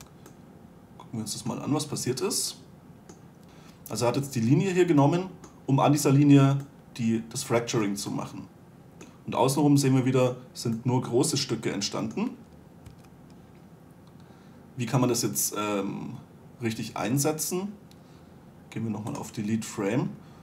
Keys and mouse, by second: 0.3 2, 2.1-3.4 middle drag, 5.8-9.2 middle drag, 12.1-13.3 middle drag, 13.3 1.